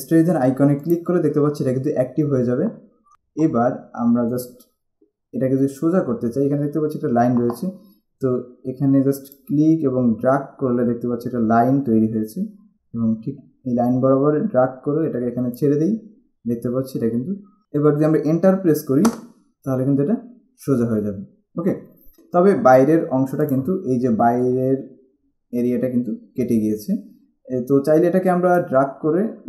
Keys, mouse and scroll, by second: 1.1 click, 6.0-7.0 scroll down 1, 9.5 click, 19.2 Return, 23.6 click, 28.7 click.